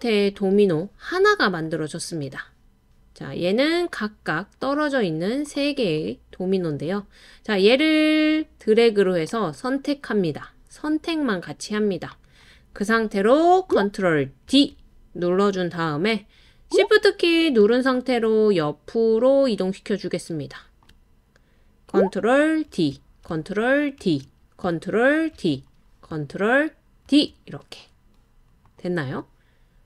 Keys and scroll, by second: 14.5 super+d, 22.7 super+d, 24.0 super+d, 25.3 super+d, 27.1 super+d.